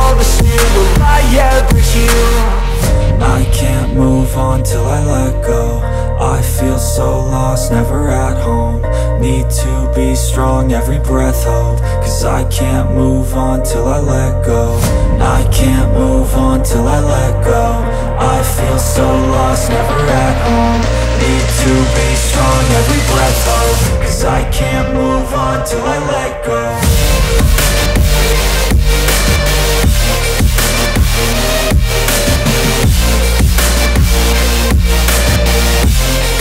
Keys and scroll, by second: 1.4 F3, 1.9 ctrl+r, 3.9 alt+b, 5.0 Return, 6.4 ctrl+g, 7.6 c, 8.3 Escape, 8.7 F3, 9.4 F2, 20.9 space, 27.8 shift+Page_Down.